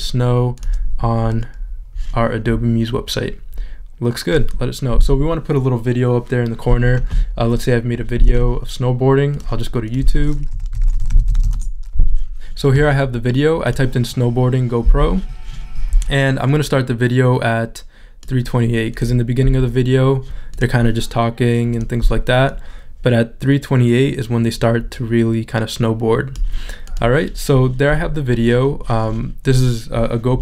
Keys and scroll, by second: 10.5 y.